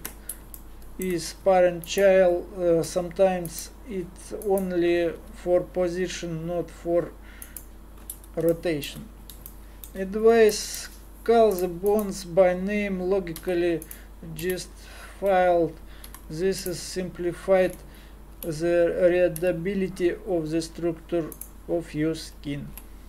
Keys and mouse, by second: 2.8 r, 5.2 r, 8.9 click, 11.9-13.3 middle drag, 13.3 g, 13.7 middle click, 14.4 KP_Divide, 16.1 g, 19.4 g.